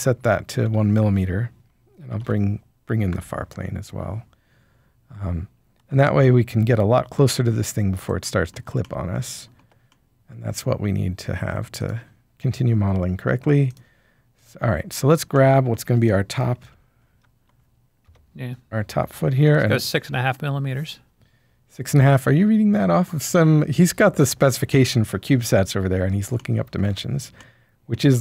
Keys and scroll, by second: 0.0-2.6 typing, 0.6 Tab, 3.1 Return, 5.4-6.6 typing, 16.6 typing, 17.8-19.9 typing.